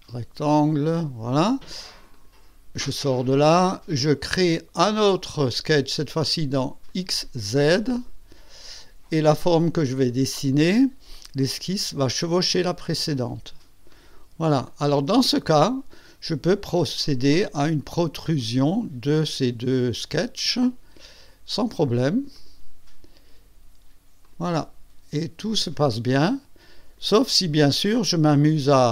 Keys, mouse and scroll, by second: 0.8 click, 2.1 click, 4.3 click, 6.9 click, 7.9 click, 10.5 click, 11.4 click, 12.8 click, 13.9 click, 14.6 click, 15.2-15.9 drag, 17.0 click, 18.1 click, 18.3 click, 19.7 click, 20.4-21.3 drag, 21.5 click, 22.3 click, 24.2 click, 25.5 click, 26.1-27.2 drag, 27.2-27.9 drag, 28.8 click.